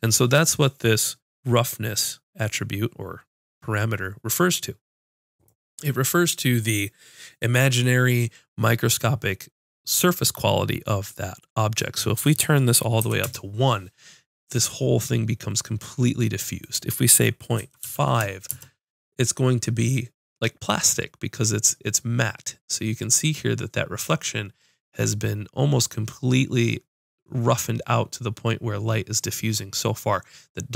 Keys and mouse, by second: 16.6-18.3 drag.